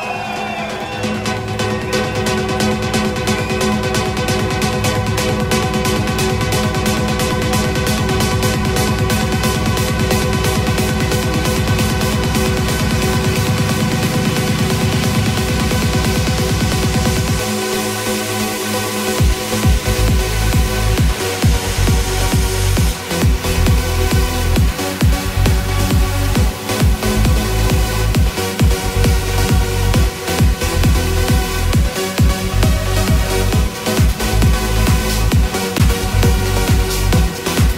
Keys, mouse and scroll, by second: 14.3 KP_0, 18.8 click, 25.9 n, 30.5-37.7 drag.